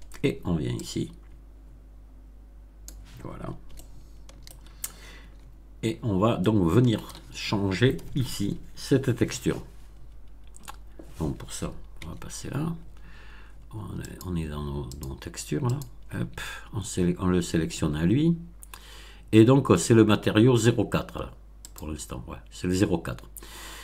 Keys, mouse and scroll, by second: 0.7-3.0 drag, 3.7-4.6 shift+middle drag, 5.1 Tab, 6.3 shift+middle click, 9.9 scroll down 2, 11.9 Tab, 14.0 click, 14.8 click, 15.6 click, 18.4 scroll up 1, 21.6 click.